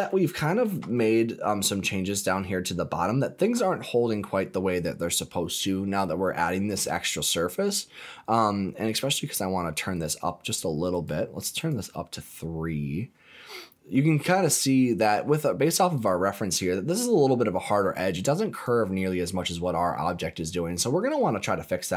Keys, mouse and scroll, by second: 0.2 shift+middle click, 0.9-2.2 middle drag, 2.5-3.0 scroll up 2, 3.0 middle click, 9.9 click, 10.8 click, 11.5 click, 13.3 scroll down 1, 13.6 middle click, 15.9 click, 18.5 click, 20.3-20.6 scroll down 2, 20.6 middle click, 21.3-21.7 scroll up 3, 21.7 middle click.